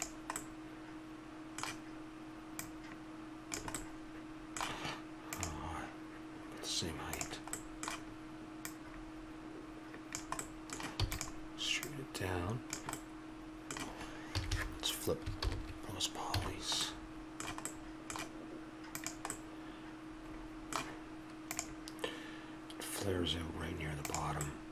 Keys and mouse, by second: 0.3-2.5 middle drag, 2.5-3.9 drag, 3.9-5.4 middle drag, 7.5-11.0 middle drag, 11.0 e, 11.8-12.9 drag, 12.9 middle click, 14.3 a, 15.4 ctrl+n, 16.3 a, 18.9-20.5 drag, 20.5-21.6 middle drag, 24.4-24.7 middle drag.